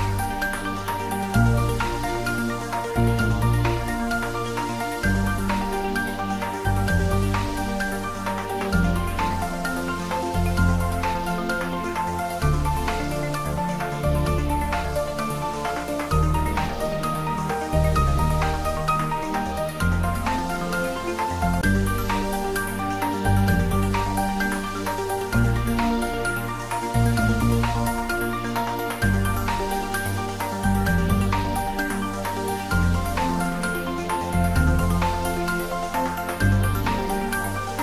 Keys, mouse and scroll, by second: 1.5 click, 4.2 click, 15.3 click, 25.3-26.9 scroll down 1, 29.5 click, 31.6-32.7 typing, 33.2 Return, 35.6 click, 36.9-37.8 typing.